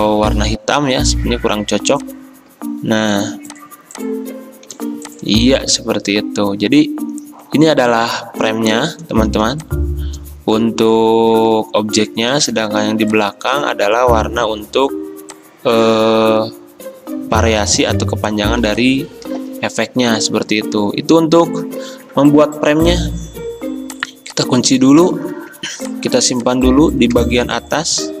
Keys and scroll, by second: 1.5 i, 4.9 v, 9.4 r, 12.4 ctrl+z, 12.4 v, 17.3 v, 18.7 v, 25.5 ctrl+2.